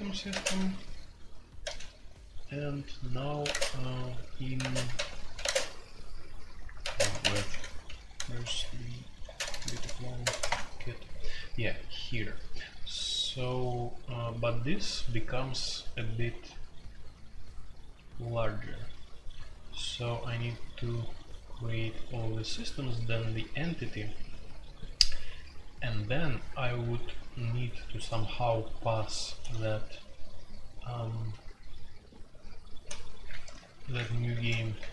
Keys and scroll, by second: 0.0-1.6 typing, 3.3-5.4 typing, 5.4 Tab, 6.6-13.7 typing, 16.2-17.0 typing, 20.0-20.7 typing, 22.5 typing, 28.5-29.5 typing, 29.5 ctrl+u, 30.7 ctrl+u, 33.6 ctrl+u, 34.2-34.9 typing.